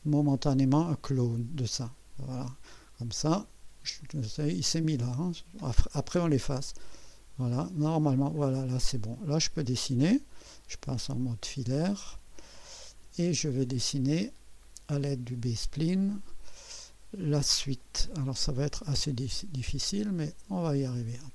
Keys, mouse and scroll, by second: 0.9 click, 4.2 scroll down 2, 6.8 click, 8.4 scroll up 1, 8.9-9.6 right drag, 17.2 scroll up 1, 17.8-18.4 right drag.